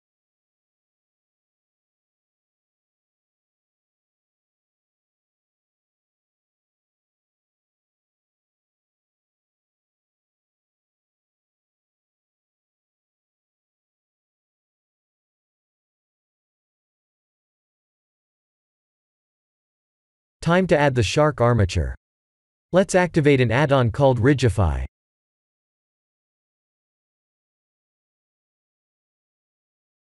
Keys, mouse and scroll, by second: 0.2 click, 1.0 1, 1.8 3, 2.4 click, 2.8 b, 5.4 x, 7.6-7.9 scroll up 3, 9.7 Tab, 9.7-10.7 scroll up 1, 11.2 click, 12.2 click, 15.0 click, 15.4 click, 16.0 middle click, 16.7 shift+z, 17.0 scroll down 2, 17.3 middle click, 17.9 middle click, 18.0 Tab, 18.5 3, 19.8 KP_1, 21.2 Tab, 21.6 click, 22.6 click.